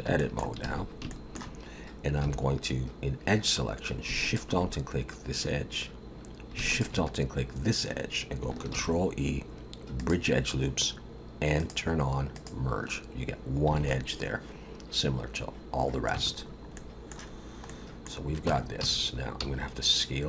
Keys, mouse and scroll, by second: 0.2 shift+middle click, 0.7 alt+a, 1.1 shift+middle click, 2.2 2, 4.3 alt+shift+click, 6.7 alt+shift+click, 8.7 ctrl+e, 11.6 click, 12.4 click, 13.8 alt+a, 16.1 Tab, 16.4-17.0 scroll down 2, 16.7 middle click, 17.3-17.7 scroll down 2, 17.7 middle click, 18.5 Tab, 18.8 a, 19.4 s.